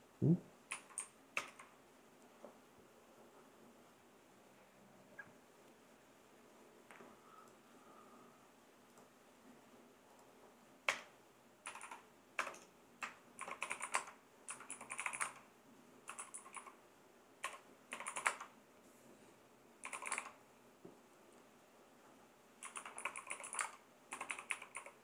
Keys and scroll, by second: 0.7 Right, 1.3 ctrl+Return, 10.9 Return, 11.6 Down, 12.4 Return, 13.2-20.5 typing, 22.4-25.0 typing.